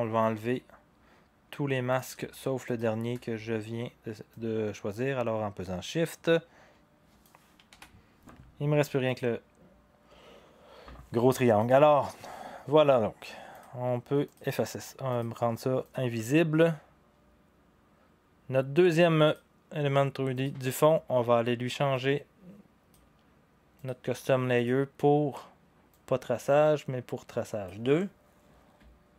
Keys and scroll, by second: 7.7 Delete.